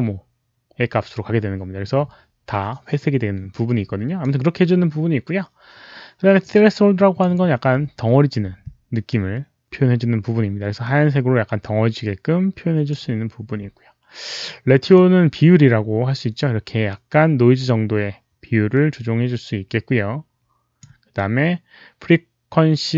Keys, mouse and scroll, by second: 6.4 click, 9.0-13.5 drag, 14.8-22.9 drag.